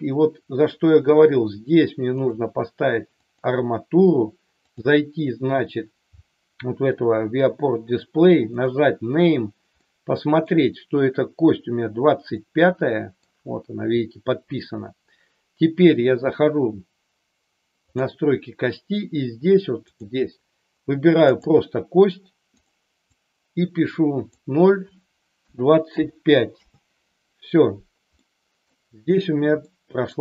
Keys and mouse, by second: 2.3-3.4 drag, 4.7 click, 9.7 middle click, 12.4-13.1 middle drag, 17.9 click, 20.0-21.4 drag, 22.7-27.2 drag, 28.2 middle click, 29.7 middle click.